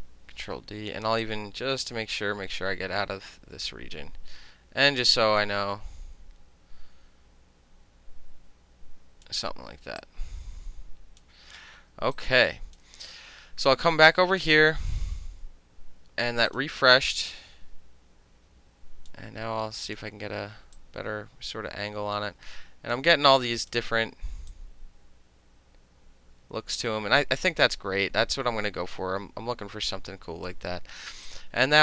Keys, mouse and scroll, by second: 0.5 ctrl+middle click, 1.3-9.3 drag, 10.1-11.3 drag, 12.0 space, 12.2 click, 14.5 click, 15.1-16.6 middle drag, 16.6 click, 16.6 middle click, 17.3-19.2 drag, 19.2 middle click, 19.9 click, 20.0 middle click, 20.8-23.0 drag, 23.0 middle click, 23.5 click, 23.8 middle click, 24.6 click, 29.6 click, 31.3 click.